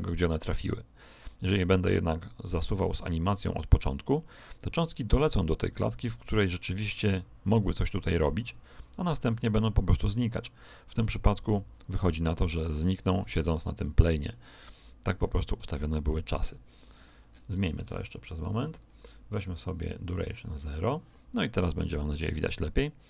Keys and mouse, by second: 1.3 click, 13.6-17.6 middle drag, 18.6-21.7 drag, 22.1 click.